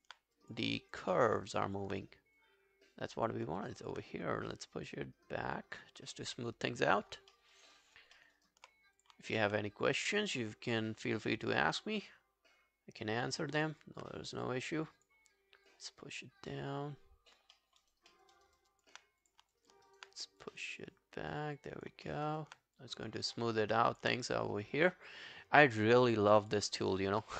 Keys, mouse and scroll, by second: 0.8 alt+click, 1.2 alt+middle click, 1.4 alt+right click, 1.6 alt+click, 3.6 alt+click, 7.3 alt+middle click, 7.6 alt+right click, 7.8 alt+click, 8.2 alt+middle click, 8.4 alt+right click, 9.3 alt+click, 13.6 alt+click, 17.6 alt+middle click, 17.8 alt+right click, 18.1 alt+middle click, 18.4 alt+right click, 18.6 alt+click, 19.6 alt+click, 19.9 alt+right click, 22.1 alt+middle click, 22.3 alt+right click, 23.6 alt+right click, 23.9 alt+click, 26.3 alt+right click, 26.5 alt+click, 27.0 alt+right click, 27.2 alt+middle click.